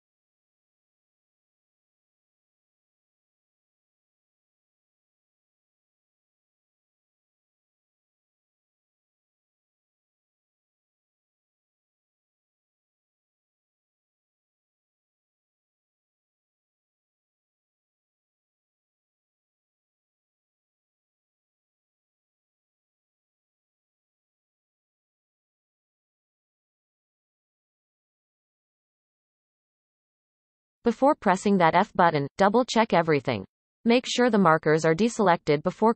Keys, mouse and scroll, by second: 7.7-8.3 scroll down 1, 8.3-9.1 shift+middle drag, 9.1 scroll up 1, 9.8-10.3 scroll up 4, 10.3-11.5 scroll up 1, 11.5 c, 15.4-15.9 scroll down 1, 15.9 shift+middle click, 16.4-17.3 scroll up 1, 17.3 c, 22.1 shift+click, 22.5-23.0 scroll down 5, 23.1-23.5 shift+middle drag, 23.5-26.0 scroll up 18, 24.2-24.5 shift+middle drag, 26.0-28.2 shift+middle drag, 28.2-29.4 scroll down 12, 30.3-31.1 scroll down 7, 31.2-32.2 shift+middle drag, 32.2 shift+click, 32.6-33.0 shift+middle drag, 33.0-33.6 scroll up 5, 33.6 shift+middle click, 34.0-35.0 scroll up 4, 35.0 shift+click, 35.3-35.9 scroll down 5.